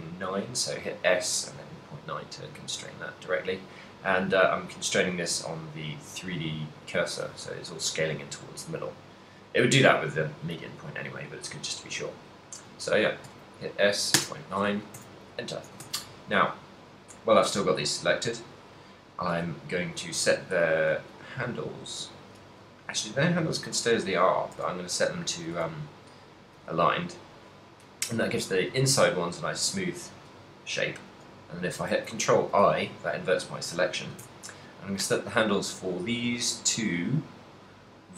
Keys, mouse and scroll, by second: 3.5 right click, 4.7 click, 7.7 s, 15.0 a, 16.0 ctrl+z, 24.6 b, 25.3 right click, 25.6 v, 32.6 ctrl+i, 35.1 v.